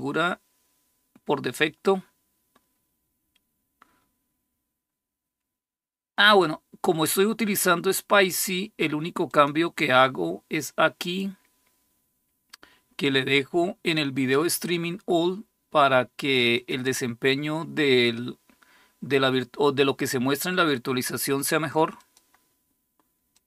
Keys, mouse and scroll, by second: 9.1 click, 10.8 click, 16.4 click, 21.8 click, 23.1 click.